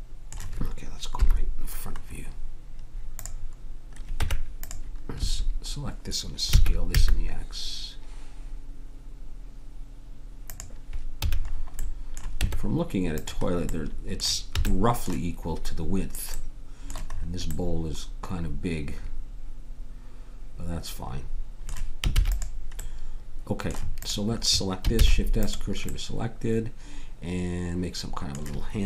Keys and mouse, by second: 1.1 KP_1, 4.1 Tab, 5.2 a, 6.5 s, 11.2 a, 12.4 Tab, 14.7 a, 19.5 middle click, 22.2 ctrl+s, 24.9 shift+s.